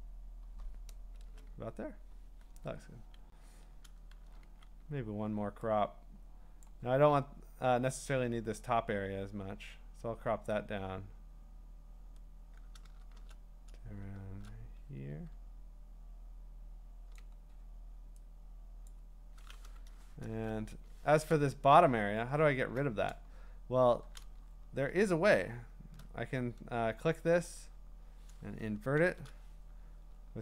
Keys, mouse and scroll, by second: 3.9 Return, 4.4 c, 6.7-9.8 drag, 13.0-15.5 drag, 17.1 ctrl+click, 18.9 click, 20.3 Return, 21.8 scroll down 2, 22.2-22.8 scroll up 4, 24.4-25.2 scroll up 10, 25.3-25.8 scroll down 3, 25.8 scroll, 27.2 ctrl+click, 28.9 ctrl+shift+i, 30.1-30.4 scroll.